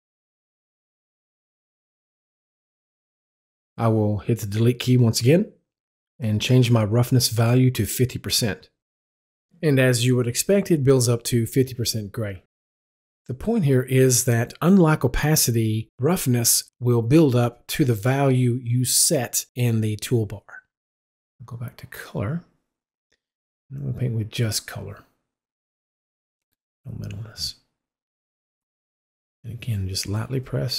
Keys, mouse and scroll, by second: 1.5-3.4 drag, 4.7 Delete, 6.5 click, 7.7 KP_5, 8.0 KP_0, 8.3 KP_Enter, 9.3-13.6 drag, 14.2-16.4 drag, 19.8 Delete, 21.5 click, 23.7 click, 26.1 click, 27.8 right click, 30.3-30.7 drag.